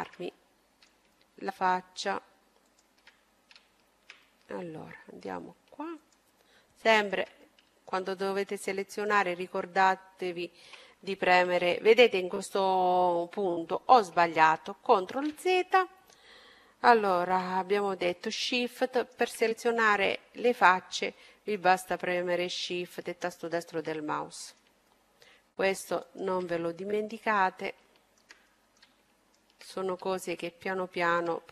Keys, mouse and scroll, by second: 1.7-3.8 right drag, 4.3 middle click, 5.3-8.0 right drag, 6.5-9.7 middle drag, 8.7-10.7 right drag, 14.2 ctrl+z, 18.0-19.9 right drag, 18.8 middle click, 19.1 click, 19.4-23.0 middle drag, 22.6-24.4 right drag, 23.2-24.4 middle drag, 24.5 middle click, 26.9-29.6 middle drag, 26.9 right click, 28.7-30.3 right drag, 29.7-31.5 middle drag, 30.7-31.5 right drag.